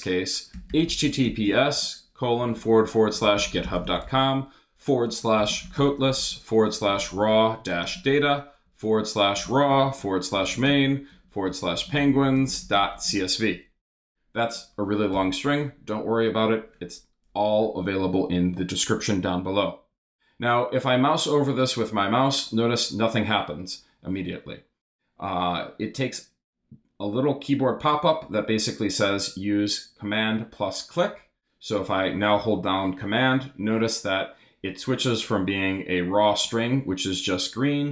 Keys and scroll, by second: 0.3-13.5 typing, 15.1 Return.